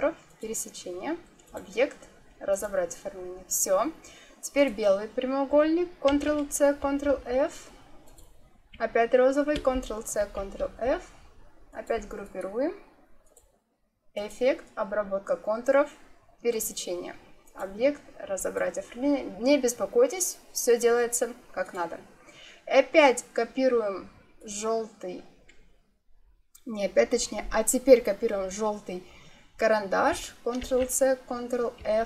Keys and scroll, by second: 6.0 ctrl+c, 6.7 ctrl+f, 9.4 ctrl+c, 10.1 ctrl+f, 30.5 ctrl+c, 31.9 ctrl+f.